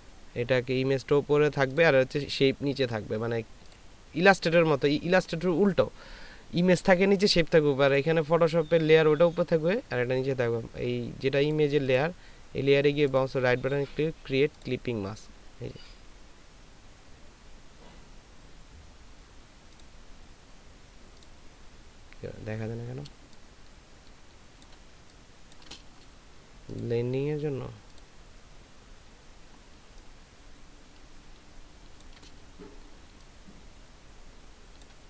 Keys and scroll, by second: 23.5 ctrl+space, 25.0 ctrl+space, 30.1 ctrl+space, 33.0 space.